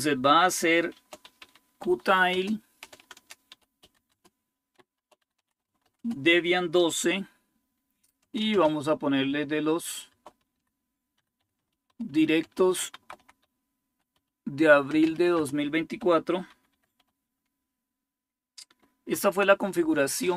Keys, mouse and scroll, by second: 0.7-8.3 typing, 9.7-16.5 typing, 18.9 typing.